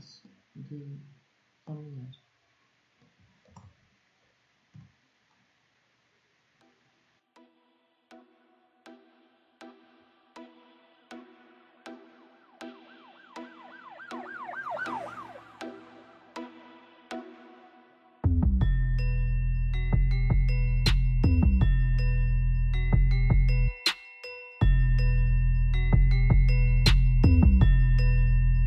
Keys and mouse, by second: 3.1 ctrl+z, 4.4 g, 8.5 click.